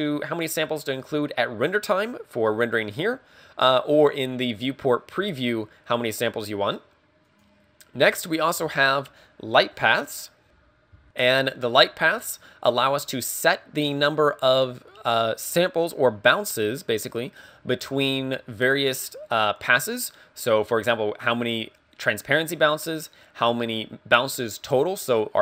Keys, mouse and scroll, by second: 7.3 click, 11.1 click.